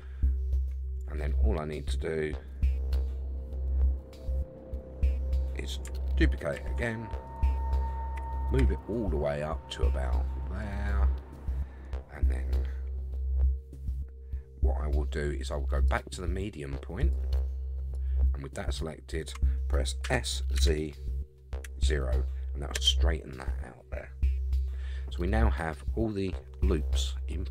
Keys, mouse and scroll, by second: 0.2 scroll up 4, 1.2 shift+middle click, 6.6 shift+d, 8.2 g, 15.9-17.1 drag, 17.9 click, 20.0 s, 24.9-25.5 scroll down 3.